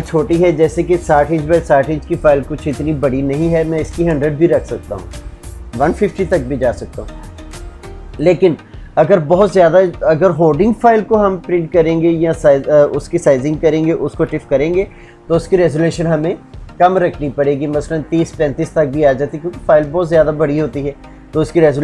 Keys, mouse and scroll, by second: 0.8 shift+Tab.